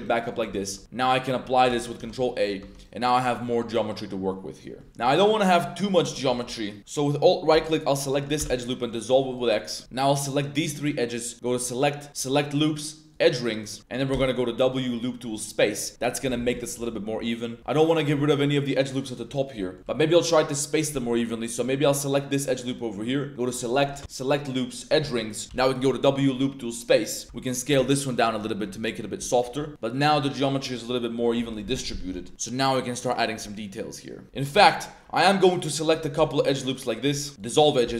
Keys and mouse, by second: 0.0 g, 0.3 click, 1.0 click, 1.7 ctrl+a, 2.0 Tab, 2.2 drag, 2.6 Tab, 2.7 click, 3.6-4.1 drag, 4.3-4.7 drag, 5.3 middle click, 5.8 middle click, 6.3 2, 6.7 middle click, 6.8 2, 8.0 alt+click, 8.4 x, 9.7 middle click, 10.1 shift+click, 10.5 shift+click, 11.6-13.2 drag, 14.1 w, 16.7-17.6 drag, 17.6 a, 17.8 drag, 17.9 middle click, 18.1 a, 18.8 click, 19.2 middle drag, 19.6 middle click, 21.5 click, 22.3 ctrl+click, 23.5-24.9 drag, 25.4 w, 27.2 ctrl+z, 27.3 click, 27.7 s, 28.6 Tab, 28.8-29.3 drag, 29.4 Tab, 29.7-31.2 drag, 31.5 click, 31.9 2, 32.1 click, 32.9 drag, 33.5-34.2 drag, 34.7 shift+2, 35.6 alt+shift+click, 36.5 alt+shift+click, 37.3 x, 37.8 1.